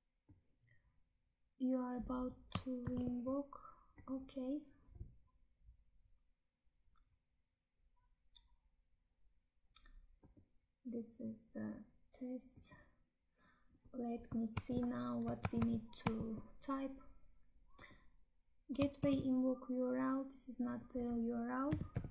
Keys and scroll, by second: 2.7 ctrl+c, 14.6 Tab, 15.4 alt+Tab, 18.8 ctrl+v.